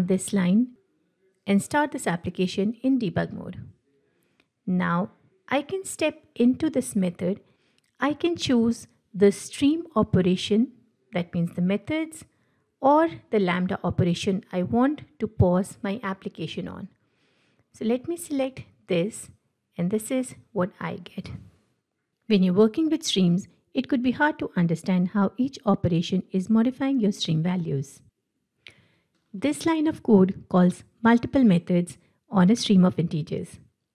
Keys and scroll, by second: 4.8 F7, 29.2 ctrl+w.